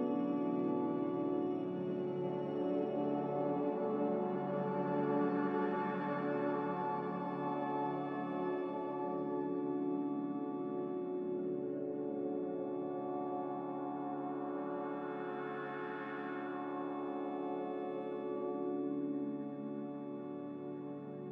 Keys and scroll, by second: 1.6 a, 3.5 5, 5.0 2, 18.0-18.9 typing, 20.2 Escape.